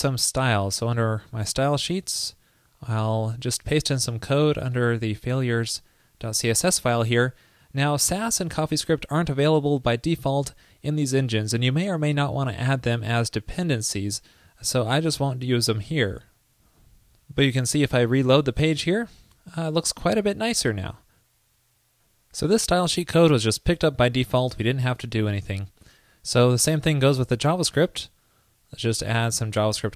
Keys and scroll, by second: 6.3 super+a, 7.0 super+v, 15.7 super+s, 18.2 super+r.